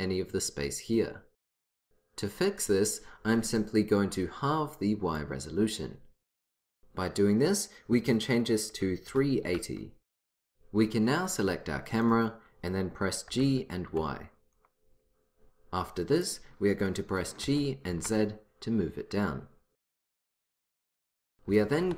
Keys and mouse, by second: 5.2-6.9 drag, 12.0-16.3 drag, 13.4 g, 17.5 g, 21.6 g.